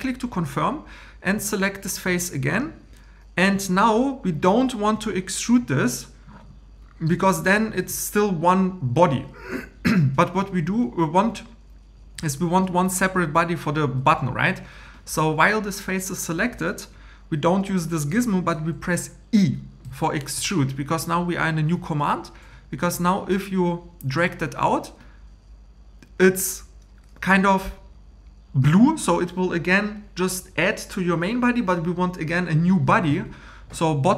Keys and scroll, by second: 10.3 Home, 19.8 e.